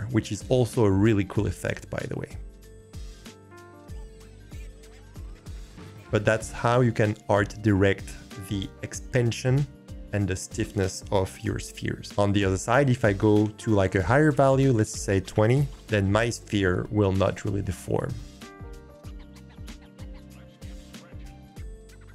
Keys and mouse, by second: 12.0-12.4 drag, 14.6-15.7 drag.